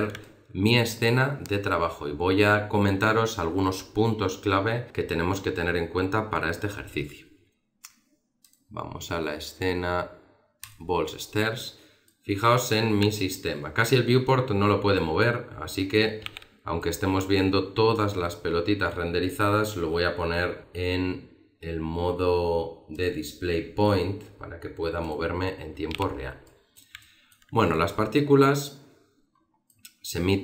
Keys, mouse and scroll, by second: 0.2 middle click, 8.4 click.